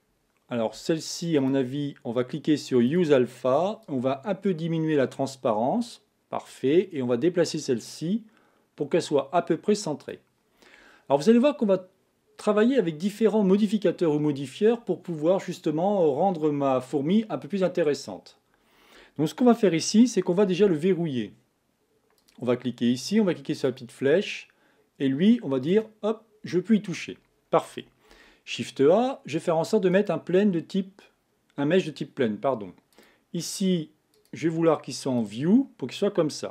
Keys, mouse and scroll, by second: 1.4 click, 2.9 click, 3.9-6.9 drag, 7.7-10.7 drag, 22.2-25.2 drag, 25.7 click, 28.1 shift+a, 32.9-36.5 drag.